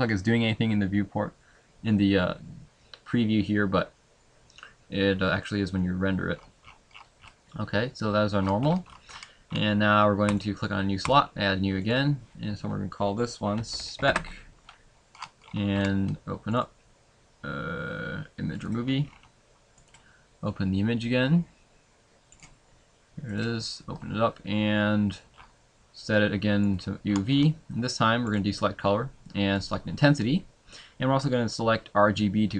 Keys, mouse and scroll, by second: 5.2-5.6 scroll down 2, 5.4 middle click, 11.2 click, 11.2-14.1 scroll up 10, 24.9 click, 27.7 scroll down 10.